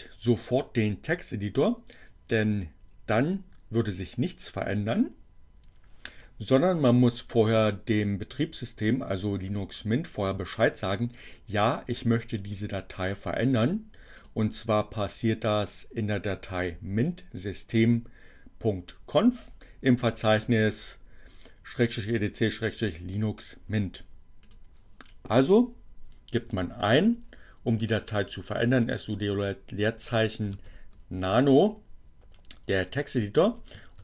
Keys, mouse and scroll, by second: 14.2 click, 24.2 click, 24.8-25.6 typing, 26.9 o, 29.4-32.0 typing, 33.7-34.0 typing.